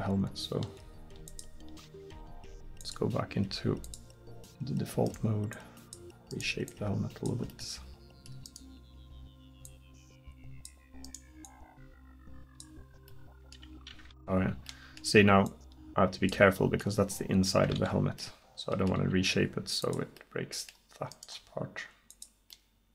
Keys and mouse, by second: 4.6 middle click, 5.6 middle click, 7.5 middle click, 14.2 ctrl+z, 15.5-17.4 drag, 17.8 ctrl+z, 18.6 middle click, 18.8 middle click, 18.9 middle click, 19.4 g, 21.3 g.